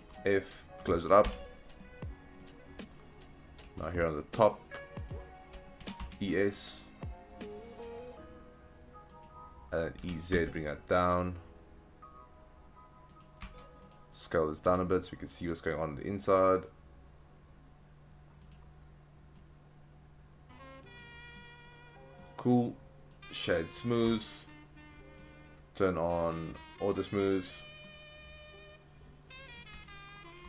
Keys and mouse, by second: 0.2 middle click, 1.3 f, 1.8 middle click, 4.4 alt+click, 5.1 alt+click, 5.8 e, 7.3 s, 9.1 click, 10.0 e, 10.3 z, 13.1 click, 13.4 Tab, 13.8 click, 14.6 s, 18.4 click, 19.3 click, 21.4-22.2 middle drag, 23.8 right click, 25.3 click, 26.2 click, 27.1 click, 27.8-29.6 middle drag, 29.8 click.